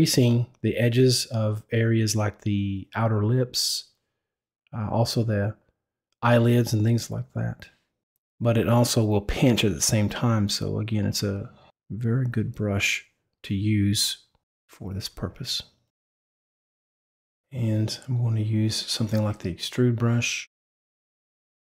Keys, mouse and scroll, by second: 0.2 click, 0.5 click, 1.7 click, 2.3 click, 3.2 click, 3.7 right click, 4.0 click, 4.3 click, 4.9 click, 5.1 click, 5.4 click, 6.4 click, 7.0 click, 7.2 click, 7.3 click, 7.9 click, 8.2 click, 9.2 click, 10.1 click, 11.2 click, 11.4 click, 12.0 click, 13.2 click, 13.5 click, 13.9 click, 14.3 click, 15.3 click, 15.4 click, 15.5 click, 15.6 click, 16.0 click, 16.1 click, 16.2 click, 16.7 click, 18.8 click.